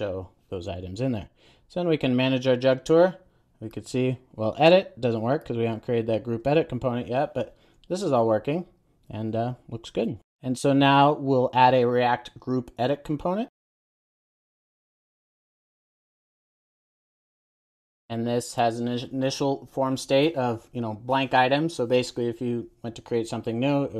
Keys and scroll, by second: 13.6 super+n, 16.4 Return, 16.7 super+s.